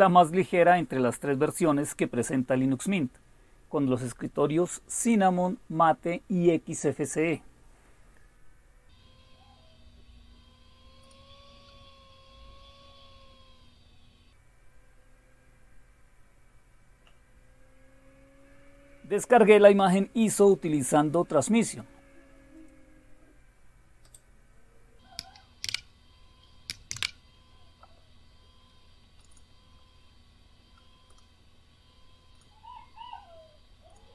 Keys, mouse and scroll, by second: 0.9-1.5 scroll down 1, 1.5-3.0 scroll down 1, 3.2-4.7 scroll down 5, 5.5 scroll down 2, 6.4 scroll down 1, 7.1-7.6 scroll down 2, 11.0 click, 11.3 click, 12.1-14.0 scroll down 4, 15.0-16.0 scroll down 2, 19.8 click, 24.1 click, 25.6 super+w, 26.9 alt+super+f, 29.2 click, 31.1 right click, 32.3 click, 33.9 click.